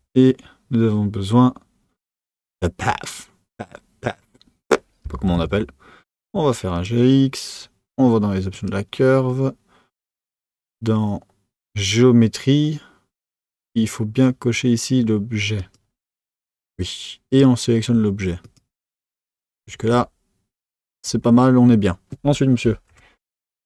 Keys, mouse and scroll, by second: 8.5 click, 15.5 click, 17.3 click.